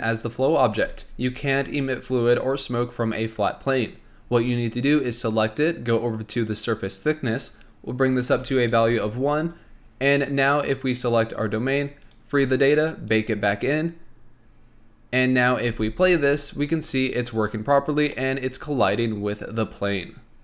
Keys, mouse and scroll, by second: 0.9 click, 4.2-6.1 scroll up 1, 7.0-10.1 drag, 11.0 click, 11.5 scroll down 3, 12.1 click, 12.5-15.5 drag, 15.5 scroll up 1, 15.8 space, 17.9 scroll up 1, 18.2-20.4 middle drag.